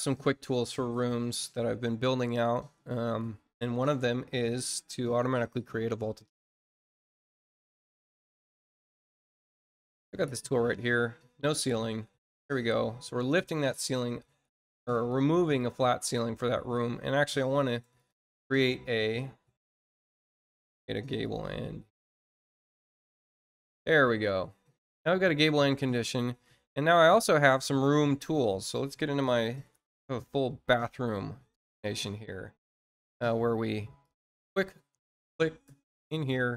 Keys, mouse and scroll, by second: 0.8 click, 3.0 click, 3.7 click, 10.6 click, 11.4 click, 14.8 click, 17.9 click, 19.6 shift+click, 21.0 click, 22.4 click, 26.8 click, 27.8 click, 32.5 scroll down 1, 33.3 scroll up 1, 33.9 click, 35.3 click.